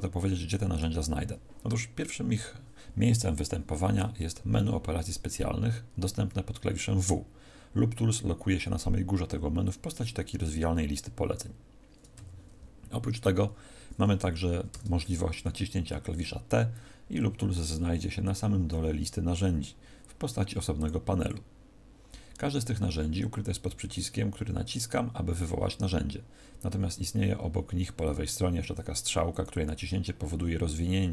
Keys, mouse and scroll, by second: 17.5-18.3 scroll down 2, 20.7 click, 20.7-21.1 scroll down 18, 30.7-31.1 scroll down 1.